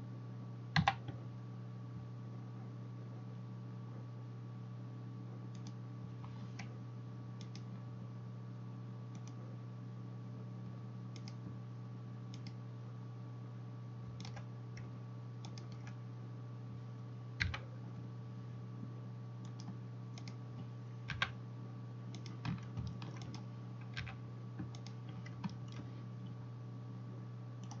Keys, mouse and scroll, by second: 0.8 w, 7.5-8.6 right drag, 9.3-27.8 drag, 11.2-14.1 right drag, 15.5 shift+middle click, 15.5 shift+right click, 17.4 f, 20.2 right click, 21.2 g, 22.9-24.2 shift+middle drag, 23.3 right click, 23.9 g.